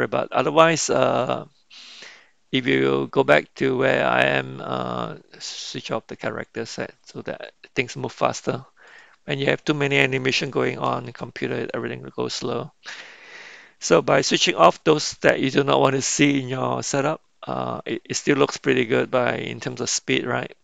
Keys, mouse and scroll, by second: 6.6 click, 7.2-7.8 middle drag, 10.8 KP_Decimal, 12.3-13.6 middle drag, 14.2-14.7 shift+middle drag, 14.9-17.9 middle drag, 19.5 click.